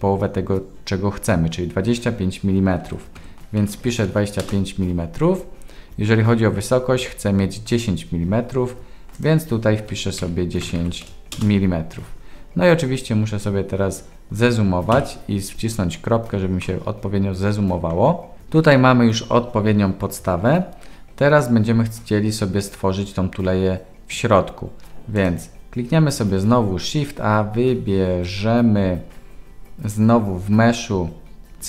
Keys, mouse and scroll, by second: 3.8 m, 9.2 click, 10.8 m, 14.9 KP_Decimal, 16.6-18.1 middle drag, 26.3 shift+a.